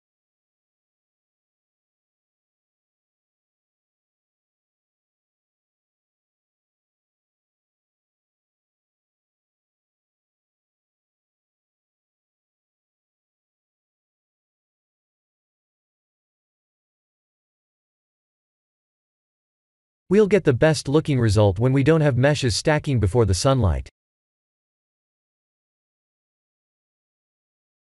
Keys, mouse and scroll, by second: 3.1 click, 4.0 h, 6.9-8.7 drag, 15.0 alt+h, 17.3-18.4 shift+middle drag, 27.2 KP_0.